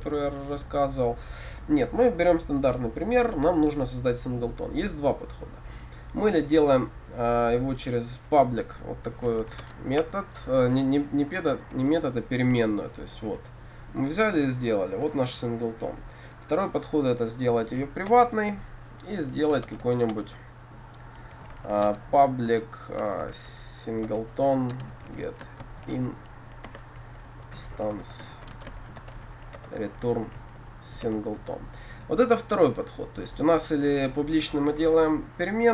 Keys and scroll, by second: 18.1 Return, 19.7 shift+Return, 24.1 Return, 29.7 Return.